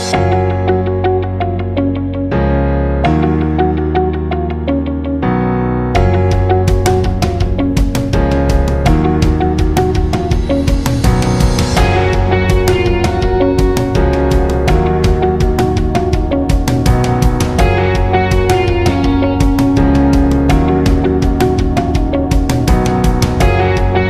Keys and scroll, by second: 9.8 ctrl+d.